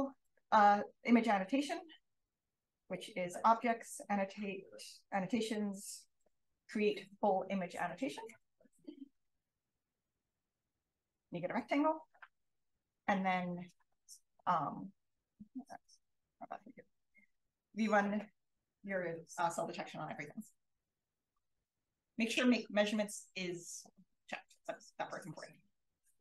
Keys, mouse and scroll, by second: 14.7-15.5 scroll up 1, 15.5 scroll up 1, 15.7 click, 17.3 click.